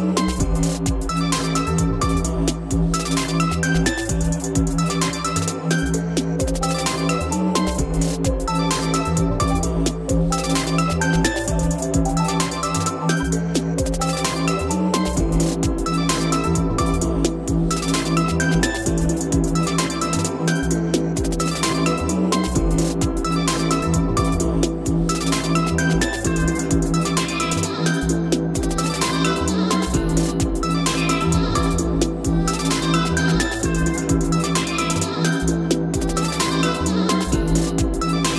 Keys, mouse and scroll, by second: 0.4 click, 0.7-1.3 scroll up 2, 1.3-1.8 scroll, 1.3 x, 1.8-2.5 scroll up 1, 2.5 scroll up 1, 2.5 m, 5.4 click, 5.9-6.5 scroll down 11, 7.3-8.2 scroll up 3, 8.2-9.2 scroll up 2, 10.3 click, 10.8-11.5 typing, 12.4 click, 12.6 middle click, 12.6 middle click, 13.5 F3, 13.5 middle click, 14.3 click, 14.6-15.4 scroll down 4, 15.4-16.2 scroll down 1, 16.2-16.7 scroll up 1, 18.2 click, 20.0-21.1 right drag, 21.3-22.9 drag, 22.9 x, 24.2 o, 25.3-26.4 drag, 27.2 click, 27.4 middle click, 27.5 scroll up 3, 27.6-27.9 scroll down 2, 27.9-28.5 scroll up 5, 28.5 scroll down 3, 28.8-30.0 scroll, 30.0-30.9 scroll, 30.9 click, 31.2 x, 33.5 click, 35.3 click, 35.4-37.8 typing.